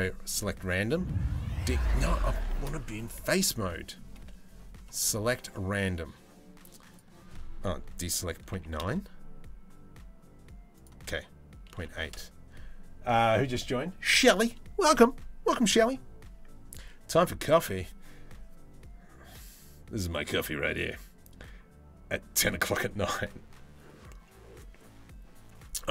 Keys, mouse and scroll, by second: 0.0 ctrl+z, 0.0 space, 0.5 middle click, 2.1 ctrl+z, 2.7 3, 3.3 middle click, 4.6 ctrl+z, 4.6 3, 4.6 space, 5.1 middle click, 6.6-8.4 right drag, 10.4-11.8 right drag.